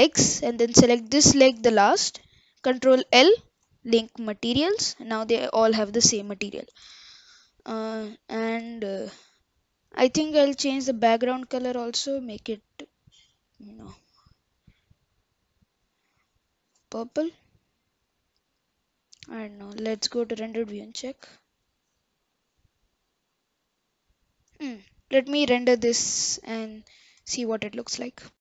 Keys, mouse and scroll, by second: 1.5 shift+click, 4.7 ctrl+l, 5.0-5.3 scroll up 2, 5.3-7.2 middle drag, 7.2-7.7 scroll down 1, 7.7-8.1 middle drag, 8.1-8.5 scroll down 1, 8.5-9.1 scroll up 3, 9.1 KP_0, 10.0 click, 11.0-12.6 drag, 16.9 scroll down 5, 19.7 click, 20.2 click.